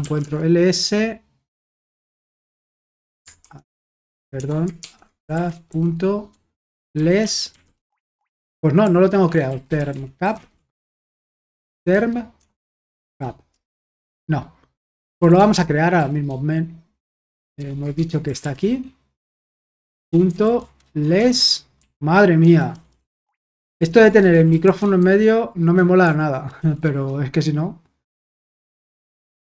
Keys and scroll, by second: 0.0-0.5 typing, 3.4 typing, 4.5-5.3 typing, 6.6-8.0 typing, 8.1 Tab, 9.1-13.5 typing, 14.8-15.9 typing, 17.6-18.4 typing, 19.4-27.3 typing.